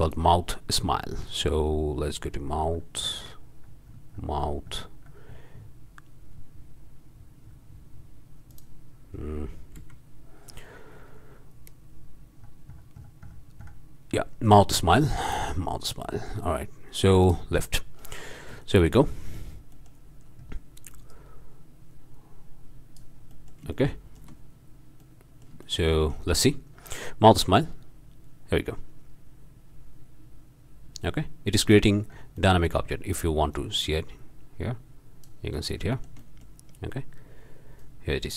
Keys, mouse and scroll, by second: 0.0 click, 1.2 scroll down 2, 2.2-2.5 scroll down 2, 2.5 click, 4.4 click, 5.0 click, 5.3 click, 5.9 click, 6.3-6.8 scroll up 2, 7.1-8.2 scroll down 2, 8.5 click, 9.8 m, 11.6-12.2 scroll down 2, 12.3-13.5 scroll down 4, 13.5-13.9 scroll up 2, 15.2 drag, 16.5 scroll up 1, 17.2 click, 18.0 drag, 18.6 shift+drag, 19.6 shift+click, 20.1 click, 21.1-23.2 drag, 23.3-23.7 drag, 23.7-24.4 shift+drag, 25.0-26.5 drag, 27.4-32.0 drag, 32.0 middle click, 32.4-32.9 drag, 33.5-35.5 drag, 35.5-35.9 drag, 36.0 shift+click, 36.9 shift+click.